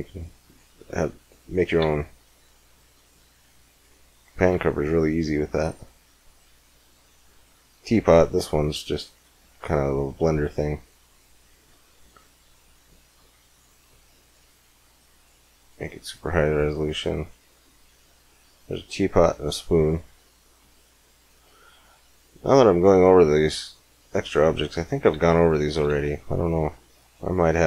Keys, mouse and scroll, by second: 0.9-2.9 right drag, 1.6 x, 4.3 shift+a, 7.2 click, 8.1-9.1 middle drag, 11.6-13.5 drag, 13.8-15.5 drag, 16.4-18.3 drag, 19.2 click, 20.2-21.3 middle drag, 22.8 g, 24.2 middle click, 24.9 x, 25.5 click, 25.7 shift+a.